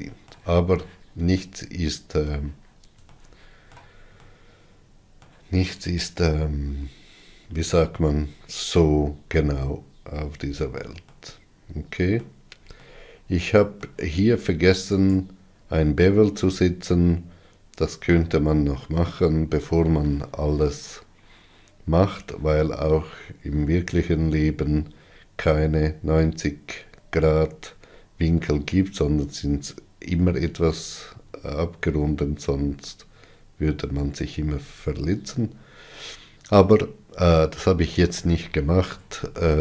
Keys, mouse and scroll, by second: 10.4-11.2 scroll down 6, 11.7-15.8 middle drag, 15.8 click, 33.8-35.0 scroll down 7, 37.4-39.6 middle drag.